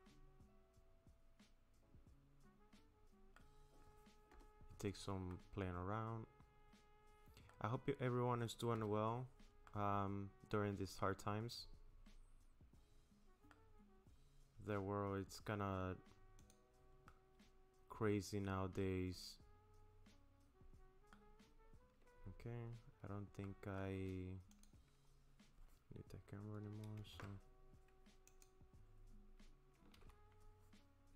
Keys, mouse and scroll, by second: 3.6-4.3 scroll down 1, 4.3 scroll down 1, 4.3 KP_0, 5.3 middle click, 8.8 KP_0, 9.7 middle click, 14.6-15.0 scroll down 3, 16.4 click, 17.1 middle click, 23.4 middle click, 24.5 click, 27.1 alt+p, 30.0 ctrl+z.